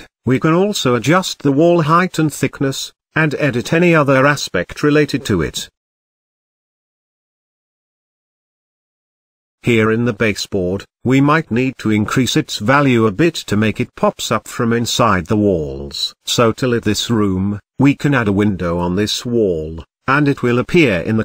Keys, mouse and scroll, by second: 0.9-2.8 drag, 2.8-4.7 drag, 5.9-7.6 drag, 7.6-7.9 scroll down 2, 7.9-9.1 middle drag, 9.1-9.4 scroll up 1, 9.4-10.7 shift+middle drag, 10.7-12.5 drag, 13.8-15.6 middle drag, 16.9-17.7 scroll down 4, 17.7-20.1 middle drag, 20.1-21.1 scroll up 1, 21.1-21.2 scroll down 7.